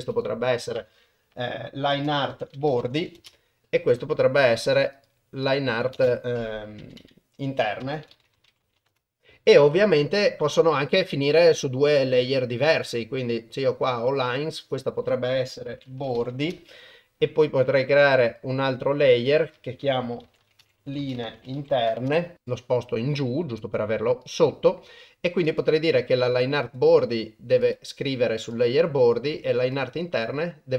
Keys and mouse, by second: 4.8-8.9 drag, 7.0 BackSpace, 12.8 click, 14.6-16.5 drag, 18.3 click, 19.4-22.1 drag, 21.0 e, 22.4 click, 25.5 click, 26.6-27.8 drag, 28.6 click, 29.9-30.7 drag.